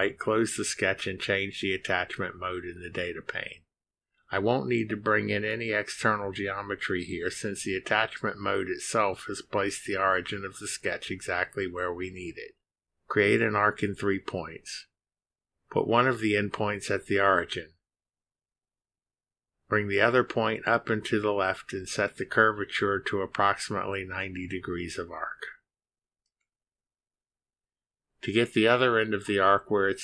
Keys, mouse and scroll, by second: 15.1 click, 17.2 click, 19.8 click, 21.2 click, 26.9 click, 27.6 click.